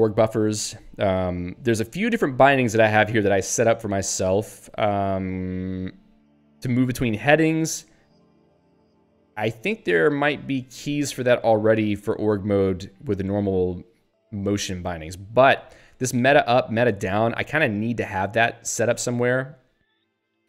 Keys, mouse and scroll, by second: 1.8 Up, 3.0 Right, 7.0 Down, 7.6 Up, 8.3 Left, 14.2 Down, 15.0 Left, 15.4 Right, 15.8 Down, 16.1 Left, 16.3 Down, 16.9 Up, 17.5 Left.